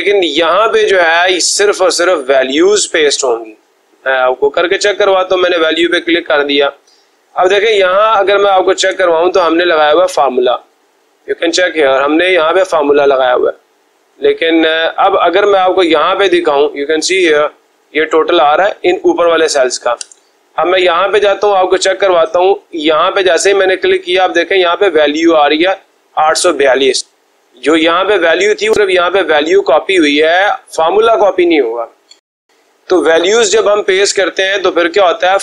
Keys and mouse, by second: 4.2 click, 7.0 click, 8.7 Escape, 10.5-11.7 drag, 13.3-14.3 drag, 17.2 click, 18.5 click, 18.8 click, 19.9 Escape, 21.5 click, 22.8 click, 29.4 click, 29.7 click.